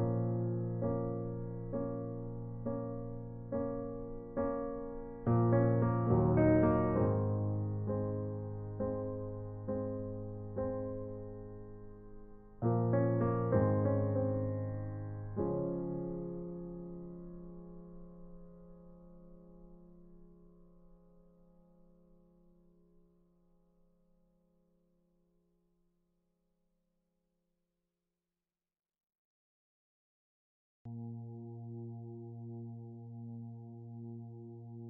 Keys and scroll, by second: 15.7-16.2 typing, 29.3 alt+shift+Delete, 33.1 ctrl+t.